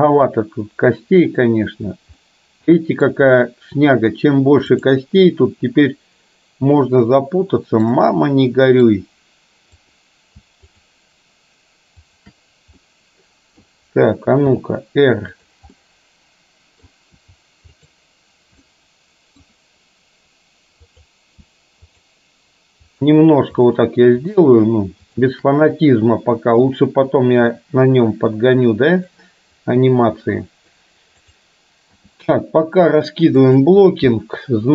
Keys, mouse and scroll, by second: 2.2-3.1 middle drag, 5.3-8.9 middle drag, 9.9-10.4 drag, 10.8-12.4 shift+drag, 12.8-13.7 middle drag, 14.6 r, 15.8-16.9 middle drag, 17.2 r, 18.7-19.4 middle drag, 20.8-21.3 drag, 21.9 shift+click, 23.7 shift+click, 25.8-26.7 middle drag, 27.6 r, 32.1 g, 34.2-34.7 middle drag.